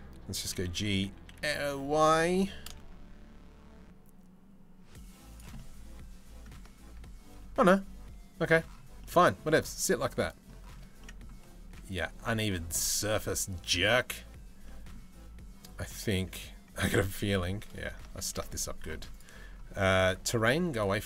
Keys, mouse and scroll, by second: 0.0 g, 5.2 middle click, 6.7 ctrl+z, 7.2 middle click, 8.6 middle click, 9.5 middle click, 10.6 middle click, 11.9 middle click, 12.8 middle click, 14.3 middle click, 15.4 click, 17.0 KP_3, 17.4 KP_1, 20.3 click.